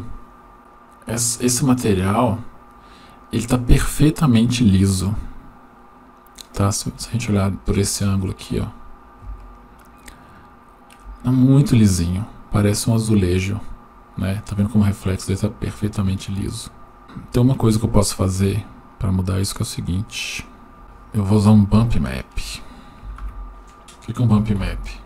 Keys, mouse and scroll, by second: 1.1-1.8 scroll up 4, 3.7-6.6 middle drag, 6.9-7.8 scroll up 4, 7.8-9.2 scroll up 3, 9.2-9.6 scroll up 1, 9.6-10.7 shift+middle drag, 17.0 shift+middle click, 17.0-17.7 scroll down 2, 18.8 click, 18.9-19.5 drag, 20.2 click, 20.5 click, 21.8 shift+middle click, 23.2 shift+a.